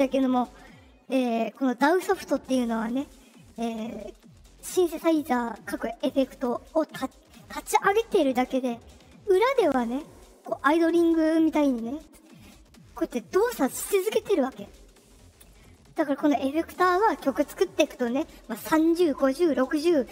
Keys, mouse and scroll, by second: 6.3 click.